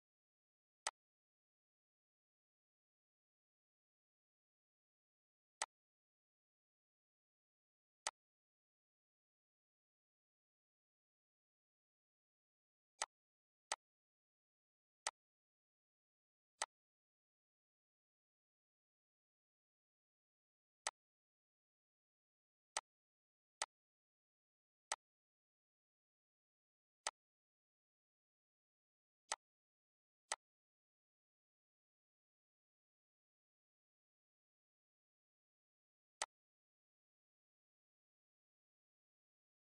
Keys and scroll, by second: 10.5 ctrl+z, 27.0 ctrl+d, 30.2 ctrl+g.